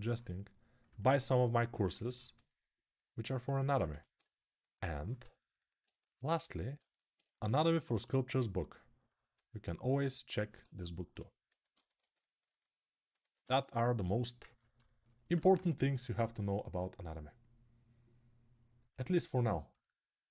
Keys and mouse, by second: 1.8 alt+q, 3.1 shift+click, 3.7 1, 5.2-10.1 alt+drag, 7.7 2, 12.2-18.1 alt+shift+right drag, 15.3 alt+q, 18.1-20.3 drag, 19.5 right click.